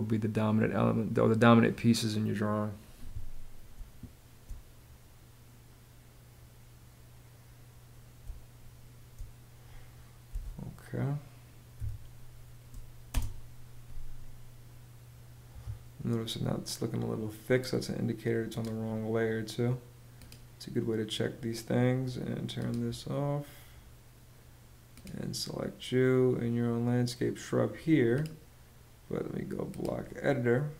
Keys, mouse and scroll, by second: 3.3 space, 7.8 space, 9.9 p, 11.3 s, 12.7 space, 15.1 Escape.